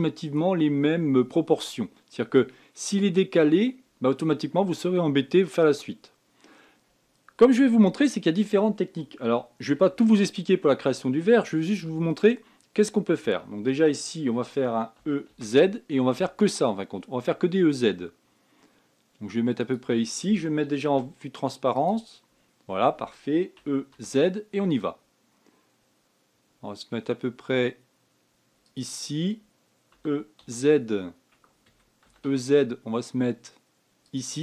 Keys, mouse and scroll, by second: 6.8-10.0 scroll down 2, 10.2 Tab, 15.4 e, 21.3 z, 22.8-24.0 scroll up 1, 24.0 e, 30.4 e, 32.5 e.